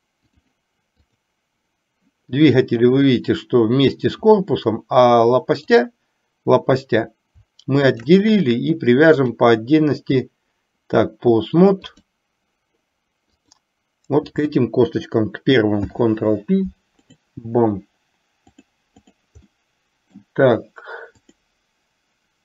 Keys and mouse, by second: 0.0 click, 5.8 click, 8.1 shift+click, 9.3-12.3 drag, 13.6 click, 15.8 ctrl+p, 18.8 click, 19.8 middle click, 21.3 click.